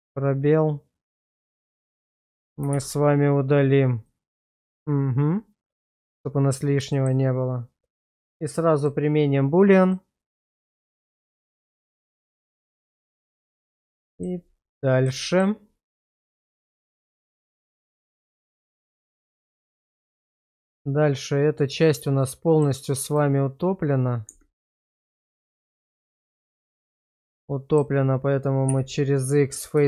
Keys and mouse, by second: 2.8 shift+z, 4.0-5.8 middle drag, 6.9 shift+middle click, 8.8-9.9 drag, 10.7-11.3 middle drag, 12.1 shift+middle click, 12.9 /, 14.0 shift+middle click, 14.7 middle click, 15.3 shift+middle click, 16.9-19.1 middle drag, 19.5 shift+middle click, 20.0-22.6 middle drag, 24.2 Tab, 25.0 click, 25.6 shift+middle click, 26.0-27.8 middle drag, 28.7 x.